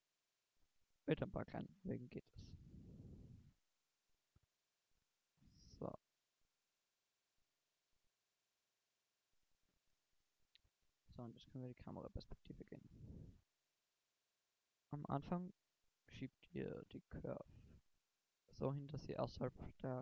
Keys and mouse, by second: 2.6 g, 6.3 Tab, 6.9 Tab, 10.1 KP_0, 11.5 shift+Left, 17.0-18.8 drag, 19.2 middle click.